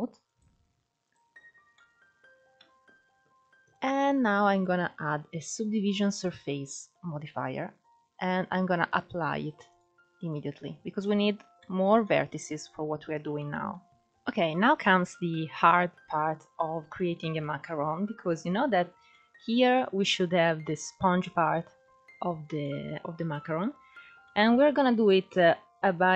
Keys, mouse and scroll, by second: 1.2 scroll down 2, 1.4-3.3 middle drag, 3.3 click, 4.2-6.9 drag, 6.9-8.5 scroll up 2, 8.5-10.7 drag, 10.7 Tab, 11.3 middle click, 12.0-12.6 scroll up 1, 12.6-13.1 scroll up 1, 13.1 middle click, 13.6 Tab, 13.9-14.7 scroll up 1, 14.7-16.5 scroll up 1, 16.6-18.2 shift+middle drag, 18.2-18.8 scroll up 2, 18.8-21.1 middle drag, 21.1-21.8 scroll down 2, 21.8-22.3 scroll up 1, 22.3-23.4 middle drag, 23.4-23.9 scroll down 1, 23.9-25.4 shift+middle drag, 25.4-26.1 scroll up 2.